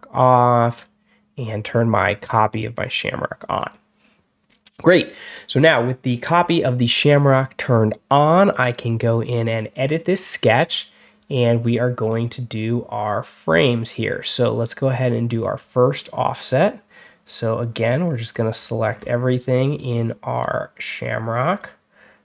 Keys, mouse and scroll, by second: 0.1 click, 0.6 click, 1.5 click, 3.4 click, 8.4 right click, 9.3 click, 11.5 scroll down 1, 14.4 click, 15.3 click, 16.2 click, 17.4 click, 17.9 scroll down 1, 18.2 scroll up 1, 18.4-19.0 scroll down 3, 19.5 click, 20.2 click, 21.3 click.